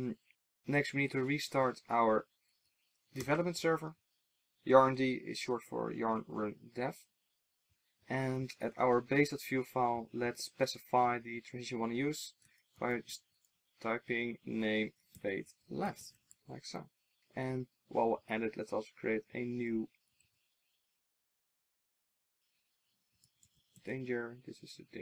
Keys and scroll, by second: 16.4 super+s, 20.2 super+d.